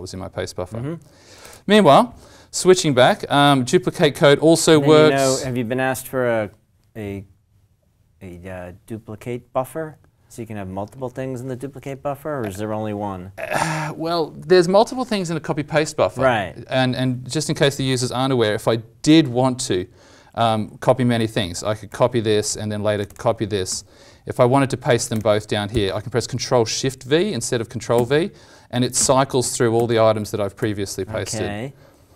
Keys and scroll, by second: 1.4 ctrl+Tab, 21.8 ctrl+c, 23.6 ctrl+c, 28.0 ctrl+shift+v, 28.9 ctrl+shift+v, 29.7 ctrl+shift+v, 30.5 ctrl+shift+v.